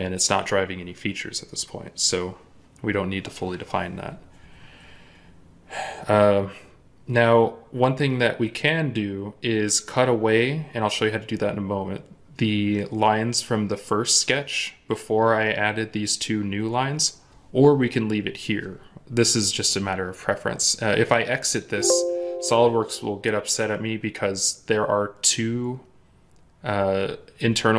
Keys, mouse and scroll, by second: 7.1-10.3 scroll down 1.